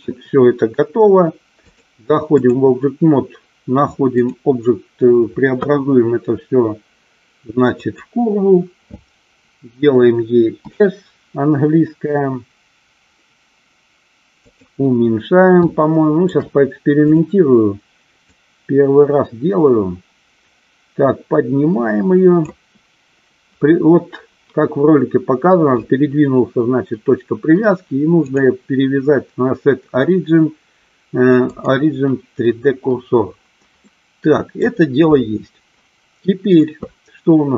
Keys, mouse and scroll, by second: 1.9 click, 4.5-8.2 drag, 10.8 s, 14.5 click, 15.9 shift+middle click, 17.2 click, 18.5-22.6 drag, 28.3-31.8 drag, 33.9 middle click.